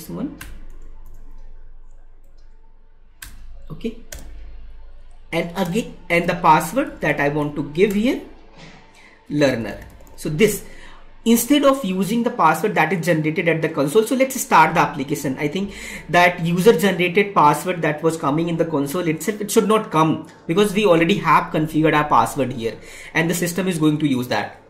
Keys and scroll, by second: 2.2 Right, 3.9 space.